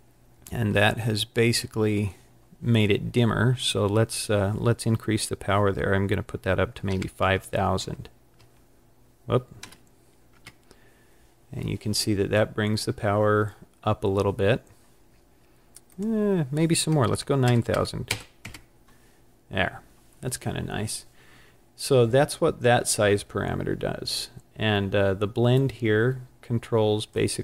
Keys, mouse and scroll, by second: 1.1-2.4 scroll up 4, 3.6 click, 7.5 KP_0, 15.9 click, 17.7 KP_0, 25.6 click, 25.8 click.